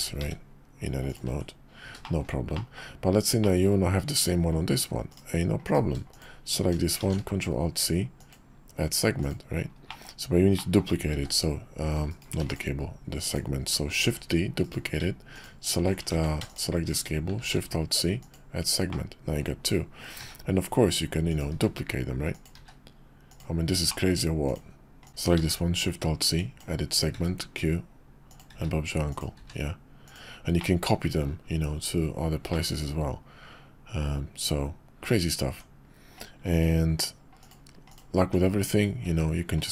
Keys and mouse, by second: 0.2 s, 1.3 Tab, 2.0 shift+middle drag, 2.5 middle click, 3.4 drag, 5.1 click, 5.6 click, 6.1 shift+click, 7.0 alt+shift+c, 9.9 click, 10.6 click, 11.1 shift+d, 12.4 x, 13.3 click, 14.0 shift+d, 15.3 shift+click, 16.1 ctrl+z, 17.4 alt+shift+c, 18.9-24.5 drag, 25.0 click, 25.1 alt+shift+c, 25.1 ctrl+z, 25.4 alt+shift+c, 30.6-36.6 middle drag, 37.4 click, 37.9 click, 38.2 Tab, 39.1 s.